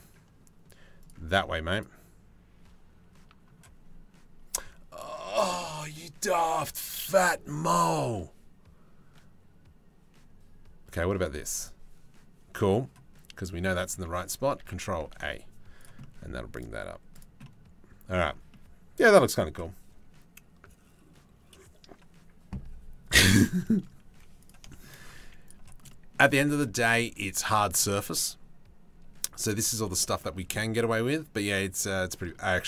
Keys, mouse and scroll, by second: 0.6 click, 0.9 click, 1.3 click, 2.7 middle click, 14.2 ctrl+a, 14.8 ctrl+a, 15.6-17.6 drag, 18.2 middle click, 18.5 middle click, 23.2 middle click, 23.7 z, 24.3 middle click, 24.8 z, 26.0 Tab, 26.4 shift+middle click, 29.8 middle click, 31.7 shift+middle click, 32.1 click.